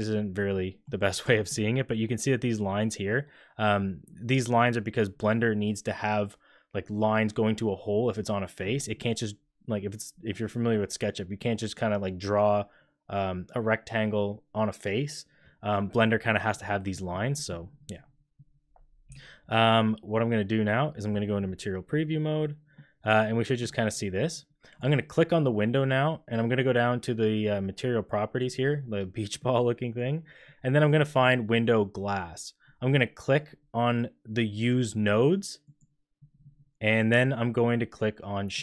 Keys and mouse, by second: 0.5 click, 1.2 shift+middle drag, 16.8 click, 17.3 click, 19.0 z, 22.7 click, 22.8 middle click, 28.3 click, 31.1 click, 35.7-38.6 drag.